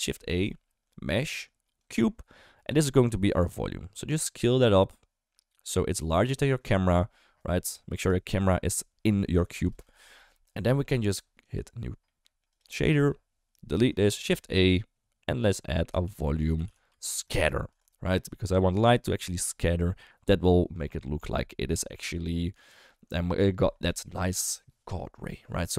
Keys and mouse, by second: 2.7 s, 6.9 middle drag, 8.1 shift+middle drag, 9.9 KP_0, 11.5 click, 12.1 middle click, 12.5 click, 13.7 ctrl+x, 14.1 shift+a.